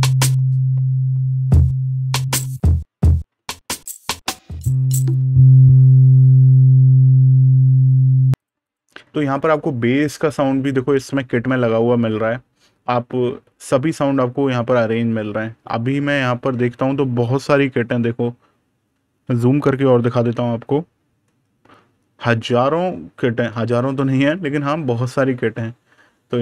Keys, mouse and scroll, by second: 8.2 click, 16.3 scroll down 1, 19.6-21.0 scroll down 1, 21.1 super+KP_Add, 21.5 scroll down 1, 22.1-24.7 scroll up 1.